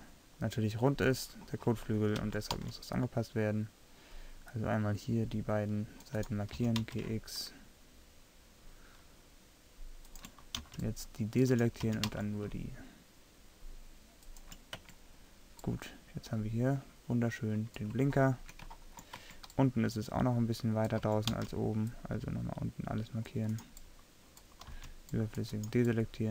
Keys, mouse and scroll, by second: 2.3 a, 2.6 c, 6.7 g, 10.7 c, 13.9 g, 14.9 Tab, 15.7 click, 16.0 click, 19.3 Tab, 21.0 a, 21.4 c, 24.8 c.